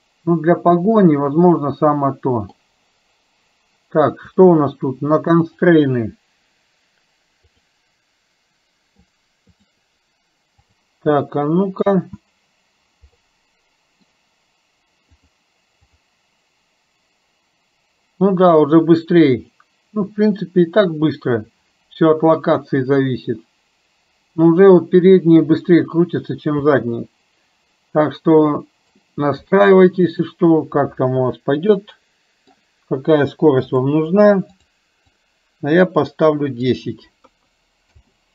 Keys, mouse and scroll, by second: 1.1-2.7 middle drag, 5.6 click, 9.6 click, 10.7 click, 11.3 middle click, 13.3 middle click, 28.5 middle click, 30.2 click, 31.8-32.7 middle drag, 33.8-38.3 drag.